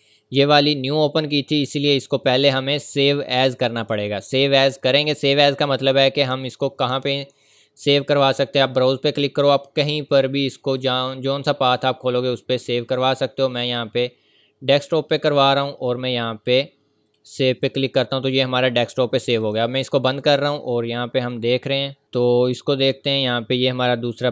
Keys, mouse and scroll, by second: 0.6-1.0 scroll down 1, 1.2-1.5 scroll up 1, 2.3 click, 8.0 click, 9.4-9.8 scroll up 1, 9.8-10.5 scroll down 1, 10.8 click, 11.4 scroll up 1, 11.8-12.1 scroll down 1, 12.1-12.9 scroll up 1, 12.9-14.8 scroll down 1, 14.8 click.